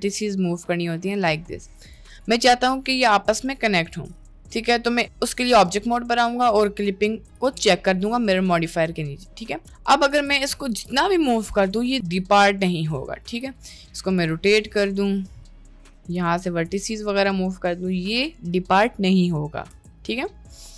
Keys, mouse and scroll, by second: 1.8 Tab, 2.3 Tab, 3.8 Tab, 4.3 middle click, 5.5 middle click, 7.3 click, 9.5 middle click, 9.7 Tab, 10.1 a, 10.7 g, 12.1 g, 12.9 middle click, 13.5 g, 14.2 r, 15.7 r, 16.2 click, 16.6 middle click, 16.8 g, 19.8 Tab, 19.9 middle click, 20.6 middle click.